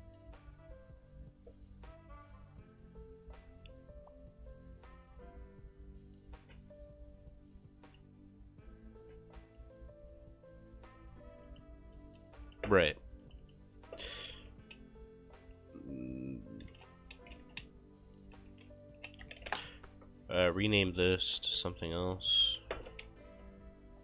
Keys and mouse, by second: 11.5 click, 12.0 right click, 12.5 click, 14.5 BackSpace, 16.5-20.0 typing, 21.7 right click, 22.3 click, 23.4 Delete.